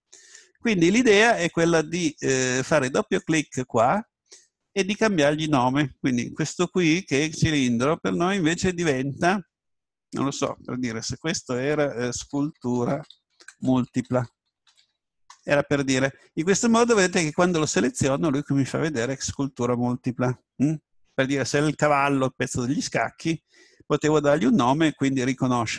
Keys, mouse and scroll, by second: 3.2-5.4 drag, 17.6 right click.